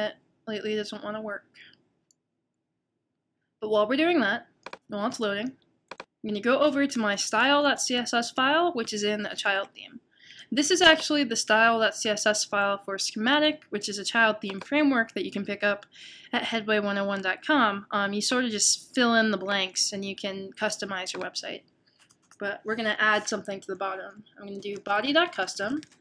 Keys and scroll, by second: 24.3-25.4 typing.